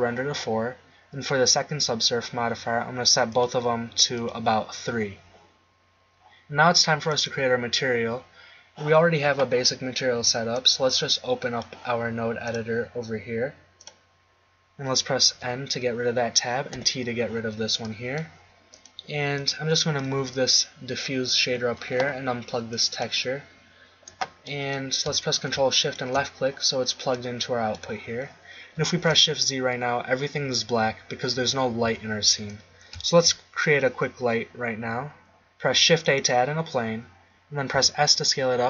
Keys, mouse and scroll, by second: 3.6-5.4 drag, 5.6 click, 7.0-9.2 drag, 10.5 click, 15.3 n, 16.7 t, 18.7 right click, 20.2 g, 24.4 click, 25.8-26.8 drag, 27.2 click, 29.0 shift+z, 31.8 z, 33.1 shift+a, 37.7 s.